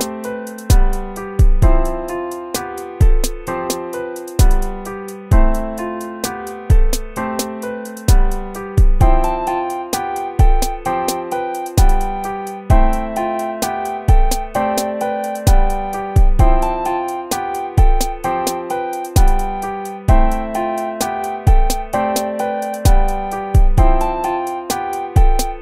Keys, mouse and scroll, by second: 1.7 ctrl+-, 2.4 ctrl++, 3.6 right click, 3.9-5.5 typing, 6.2 ctrl++, 8.4 BackSpace, 10.4 ctrl++, 10.7-16.1 typing, 11.5 ctrl+-, 11.9 ctrl++, 12.7 ctrl+-, 17.6 ctrl++, 18.0 BackSpace, 18.2 BackSpace, 18.7 ctrl++, 19.0 BackSpace, 19.2 ctrl++, 21.3 ctrl++, 21.6-23.4 typing, 24.3 ctrl++, 24.5 BackSpace, 24.6 BackSpace, 25.0 BackSpace, 25.1 BackSpace.